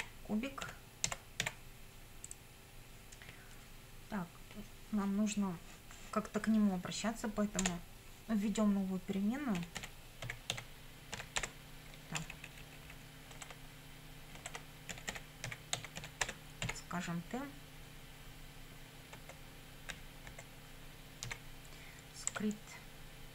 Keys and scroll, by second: 0.0-1.9 typing, 7.6 Return, 9.3-12.2 typing, 14.7-16.7 typing, 19.2 space, 19.9 =, 20.3 space, 21.3 s, 22.3 Tab.